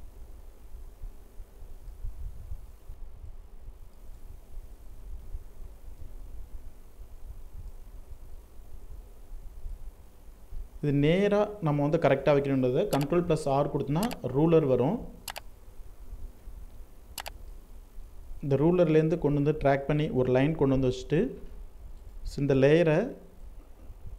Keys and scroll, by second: 1.5 ctrl+t, 11.9 ctrl+r, 15.0 ctrl+alt+z.